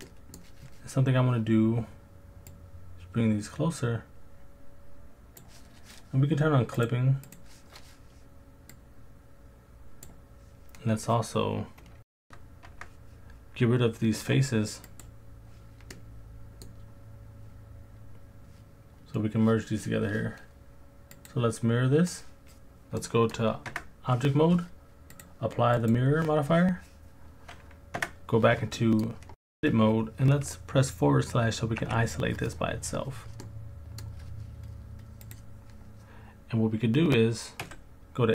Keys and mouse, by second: 0.1 middle click, 2.5 click, 6.8 click, 7.3 click, 8.8 click, 12.2 Tab, 12.7 Tab, 14.2 Delete, 15.9 click, 21.3-22.2 drag, 23.1 middle click, 23.7 Tab, 25.3 click, 28.0 Tab, 28.8 middle click, 31.8 KP_Divide, 31.8 click, 33.5 middle click, 35.2 click, 37.6 2.